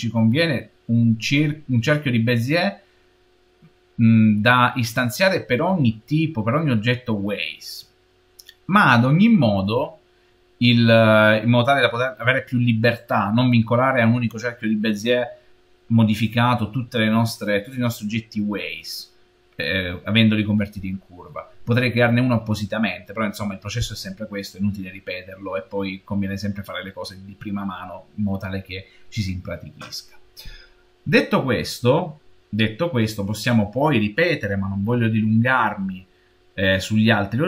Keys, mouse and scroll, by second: 31.5-34.5 middle drag, 37.0-37.4 scroll down 1.